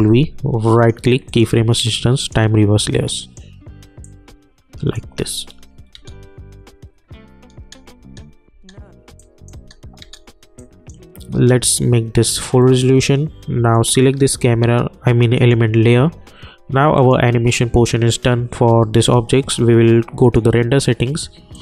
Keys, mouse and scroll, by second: 2.9-6.0 drag, 6.0 space, 9.2 click, 9.6 space, 10.6 click, 20.2-21.6 drag.